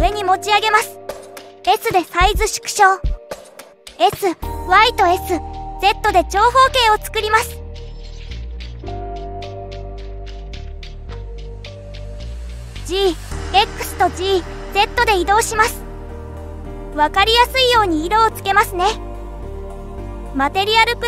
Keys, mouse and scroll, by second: 3.4 s, 6.1 scroll up 3, 6.5 middle click, 7.9 s, 10.0 s, 13.0 middle click, 13.7 g, 15.6 middle click, 16.9 g, 19.0 click, 19.4-20.4 middle drag, 20.9 click.